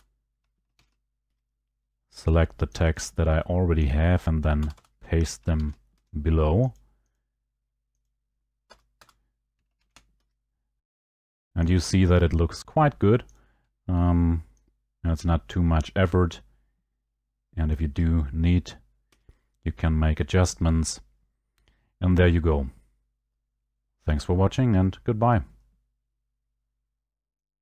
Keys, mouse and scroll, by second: 0.8 ctrl+v, 1.3 Escape, 2.3 click, 2.8 click, 3.9 click, 4.6 Return, 4.8 Return, 5.6 ctrl+v, 6.0 Escape, 6.8 click, 7.2 click, 8.0 click, 8.7 Return, 9.0 Return, 9.8 ctrl+v, 10.1 Escape, 11.0 click, 12.4 middle click, 13.3 click, 17.7 ctrl+click, 19.0 Escape, 21.7 scroll, 23.8 scroll, 24.5 scroll, 25.3 scroll, 27.5 click.